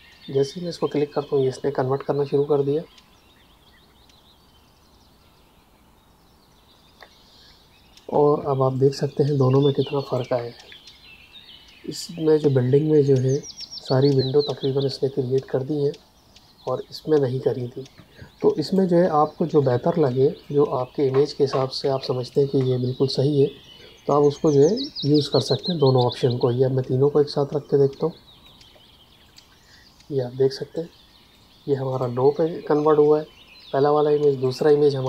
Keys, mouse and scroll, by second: 8.1 space, 8.7 click, 10.6 Tab, 17.9 space, 18.5 ctrl+alt+click, 20.0 click, 21.5 space, 22.2 ctrl+alt+click, 25.0 click.